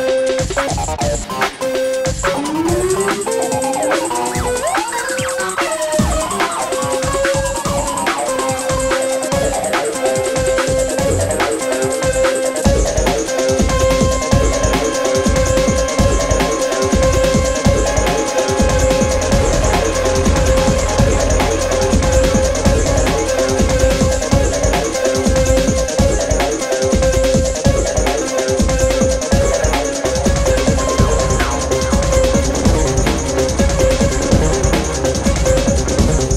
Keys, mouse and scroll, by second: 2.5-7.1 drag, 7.1-10.0 alt+drag, 10.0 ctrl+d, 11.7-12.0 alt+scroll down 1, 12.4 click, 12.9 alt+scroll down 1, 12.9-13.7 drag, 14.9 alt+scroll up 1, 15.5 ctrl+g, 16.1 right click, 18.9 click, 19.7-23.2 drag, 20.7-22.9 shift+drag, 23.2-24.3 alt+scroll down 4, 24.3-25.2 click, 26.3 ctrl+g, 27.1 click, 29.0 click, 30.9 alt+scroll down 2, 31.2 click, 31.7-32.8 alt+scroll up 2.